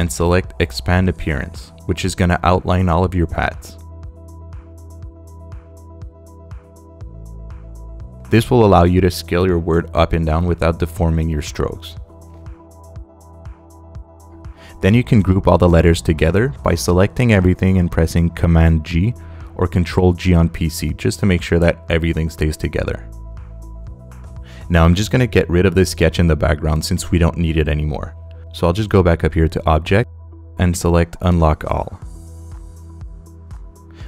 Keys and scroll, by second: 4.3 space, 14.6 space, 15.8 space, 20.4 super+g, 25.7 space.